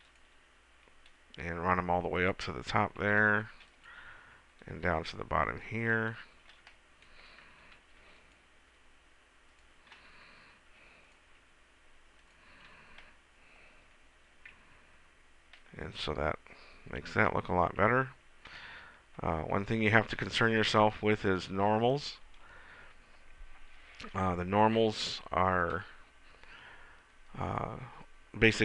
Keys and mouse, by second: 2.8-4.3 drag, 3.5 ctrl+r, 8.0 ctrl+r, 9.6-11.8 drag, 10.8 ctrl+r, 12.6-13.6 drag, 15.0 Tab, 17.6-18.8 middle drag, 18.0 Tab, 25.1-28.6 middle drag.